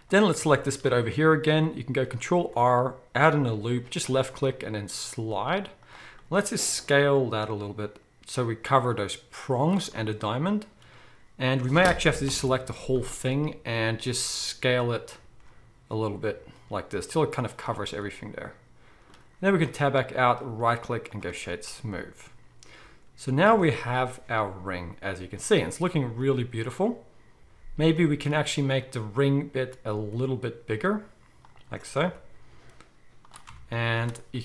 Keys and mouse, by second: 0.1-4.3 shift+right drag, 0.8 Tab, 2.3 ctrl+r, 4.3-12.4 drag, 6.7 s, 12.3 ctrl+l, 12.4-28.6 right drag, 14.9 s, 19.5 Tab, 23.6 alt+a, 27.4 KP_1, 28.6 middle click, 28.7-34.4 right drag, 29.9 s, 31.6 g, 33.4 Tab, 33.7 z.